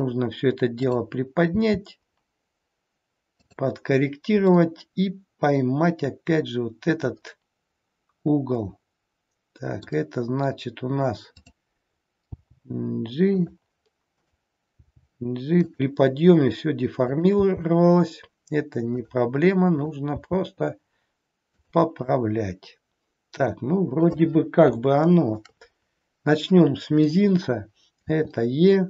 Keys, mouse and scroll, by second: 0.7 click, 1.6 g, 4.6 middle click, 11.3 click, 12.3 g, 14.1 click, 14.8 g, 17.1 click, 17.5 g, 19.7 click, 20.2 g, 22.0 middle click, 24.8 shift+middle click, 25.7-27.7 scroll up 3, 28.1 e.